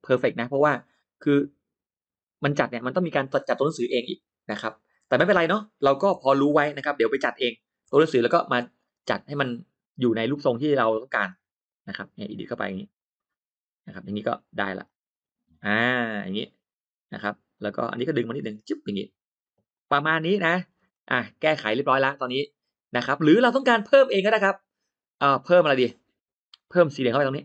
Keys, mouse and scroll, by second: 0.2 click, 6.5 ctrl+z, 7.1 ctrl+z, 8.6-9.0 scroll up 2, 9.2 click, 9.6 middle click, 9.8 scroll up 2, 10.0 click, 10.3 click, 10.8 click, 11.1 click, 11.5 click, 11.8 click, 12.4 click, 12.8-13.9 drag, 14.2 click, 14.7-16.8 drag, 17.4 click, 18.4 click, 19.5 click, 19.9 middle click, 19.9-20.2 scroll down 1, 20.1 click, 20.4 middle click, 21.2 middle click, 21.6 middle click, 22.3 middle click, 22.9 scroll up 2, 23.8-24.1 scroll up 2, 24.3 scroll down 2, 24.7-25.0 scroll up 2, 25.2 middle click, 26.4 click, 27.1 click.